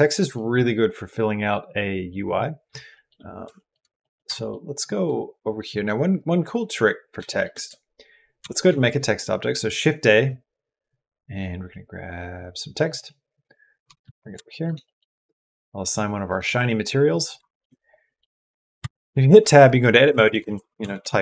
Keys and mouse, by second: 2.7 shift+middle click, 3.4 shift+middle click, 3.8 middle click, 4.2 shift+middle click, 6.1 click, 7.1 shift+click, 8.5 shift+a, 13.7 g, 14.3 shift+click, 14.7 click, 16.2 click, 17.3 shift+click, 17.9 click, 18.2 click, 18.8 Tab, 20.0-21.2 typing.